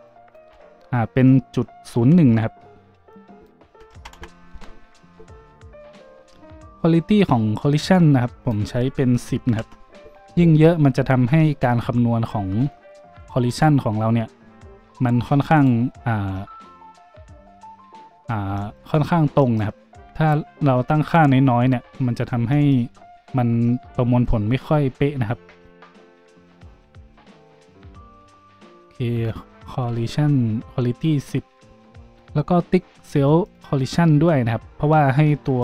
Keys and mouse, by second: 13.2 middle click, 13.2 click, 13.4 middle click, 13.6-15.5 drag, 15.5 middle click, 15.6-33.5 drag, 33.5-35.6 middle drag.